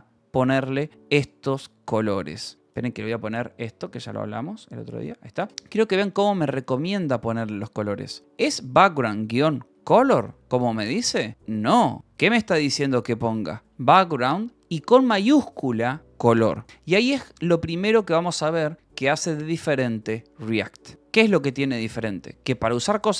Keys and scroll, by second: 2.8 ctrl+p, 5.5 Escape, 5.8-7.6 typing, 8.7-10.7 typing, 12.0 Escape, 12.7-15.6 typing, 17.0 l, 22.2 l.